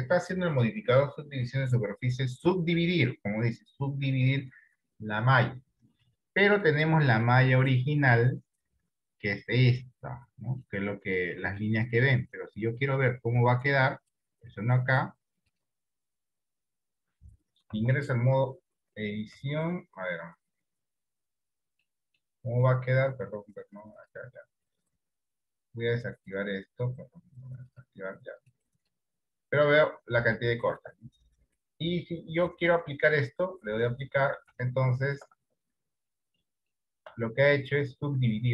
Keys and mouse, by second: 7.6 middle click, 11.0 middle click, 12.1 middle click, 14.1 click, 18.0 Tab, 19.5 Tab, 22.0 middle click, 26.3-28.5 drag, 28.5-30.6 right drag, 30.6 shift+middle click, 33.2 click, 34.8 shift+middle click, 35.8 Tab, 36.6 middle click, 36.9 shift+middle click, 38.0-38.5 middle drag.